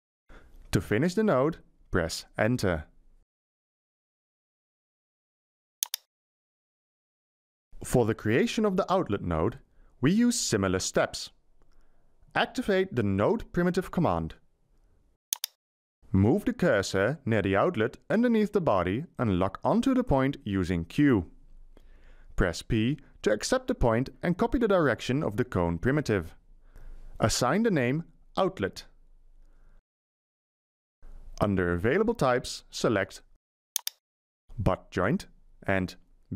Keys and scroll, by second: 2.6 Return, 12.3 Escape, 20.8 q, 22.7 p, 28.3-31.2 typing.